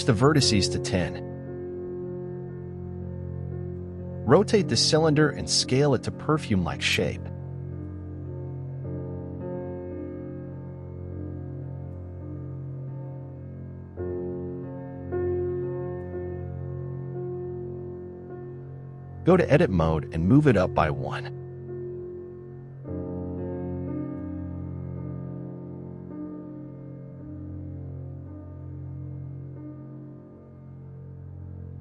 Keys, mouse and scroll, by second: 3.3 r, 11.4 click, 11.6 s, 13.3-13.6 scroll up 5, 13.6-14.7 middle drag, 14.7 s, 17.0-17.3 middle drag, 17.3-17.7 scroll up 1, 17.7-18.9 shift+middle drag, 18.9 Tab, 19.3-21.0 shift+middle drag, 21.0 g, 23.3 click, 23.8 shift+middle click, 24.7 click, 26.3 middle click, 27.1 s, 31.4 scroll down 2, 31.7-31.8 scroll up 3, 31.7 shift+middle click.